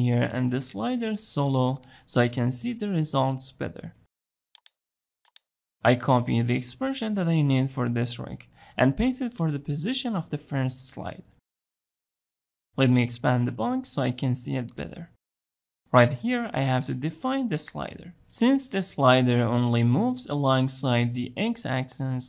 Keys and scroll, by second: 10.7 ctrl+v.